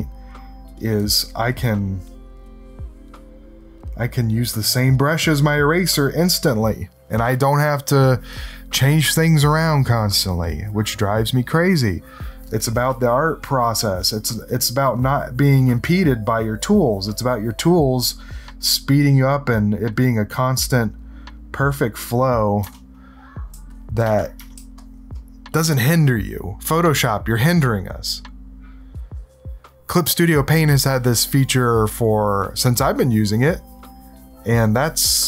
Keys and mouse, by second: 2.2-3.8 drag, 4.9-6.3 drag, 13.1 click, 15.0-17.1 drag, 17.4-19.9 drag, 20.5 click, 21.7 click, 22.7 ctrl+-, 23.5 space, 23.7 click, 24.5 space, 24.7 click.